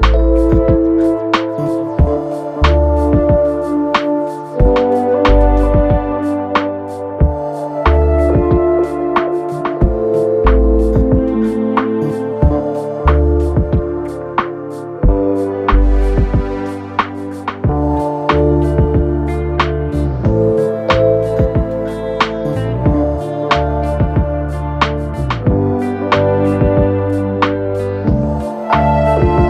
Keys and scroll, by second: 12.1 Delete, 14.7 9, 14.8 Return, 17.8 3, 27.6 4.